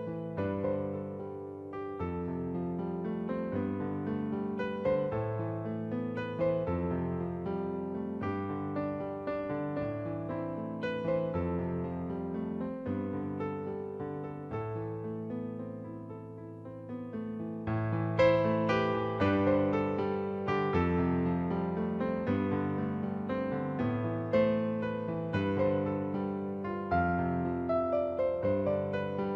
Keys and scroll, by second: 8.6 ctrl+t, 11.2 Return, 18.3 ctrl+t, 21.5 Return, 22.5 ctrl+t, 25.5 Return.